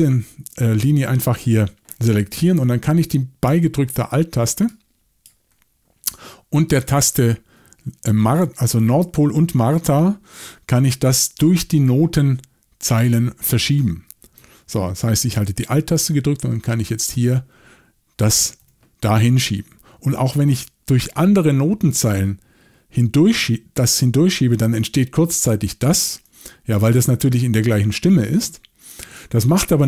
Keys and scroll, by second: 16.6 alt+m, 18.6 alt+m, 21.0 alt+n.